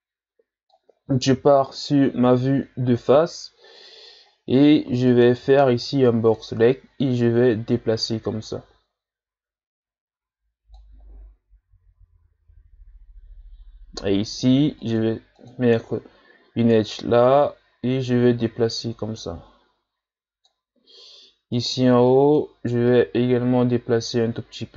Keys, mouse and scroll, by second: 1.3 KP_1, 3.1 z, 3.5-3.9 scroll up 1, 3.9 z, 5.1 right click, 5.4 b, 7.2-10.3 drag, 14.3 ctrl+r, 17.4-20.5 drag, 21.6 right click, 21.8 b, 22.9-24.7 drag.